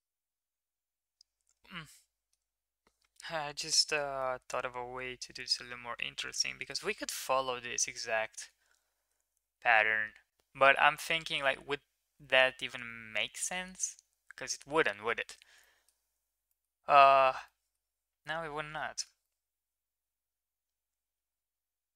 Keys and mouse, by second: 4.1-5.2 middle drag, 15.6 middle drag, 16.4 middle click, 17.4 middle click, 19.2-21.9 middle drag.